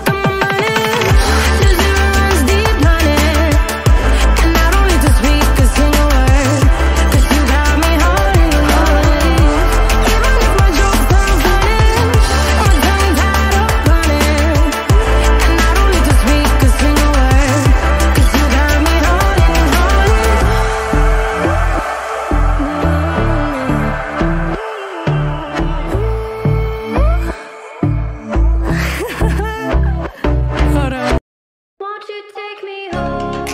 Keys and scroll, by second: 5.2 Return, 9.5 alt+BackSpace, 11.2 ctrl+z, 15.6 ctrl+v, 25.2 alt+BackSpace.